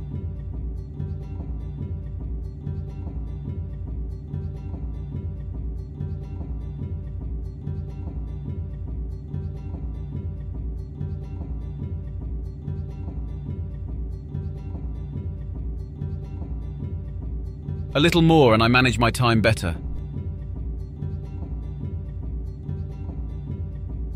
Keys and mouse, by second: 16.6 click, 17.5-17.8 drag, 18.3-20.1 drag, 20.4 click.